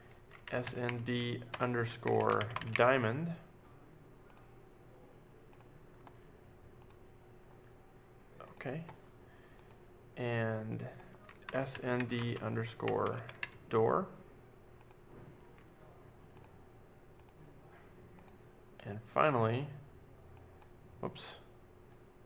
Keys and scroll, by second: 0.1-3.1 typing, 11.1-13.9 typing.